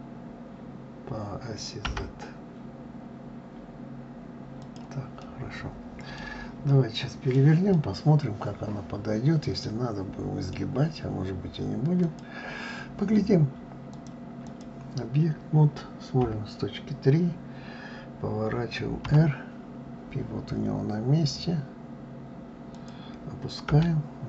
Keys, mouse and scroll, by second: 5.2-10.7 middle drag, 11.1-12.0 scroll down 2, 12.0 click, 13.9-16.2 drag, 16.2 KP_3, 19.0 r.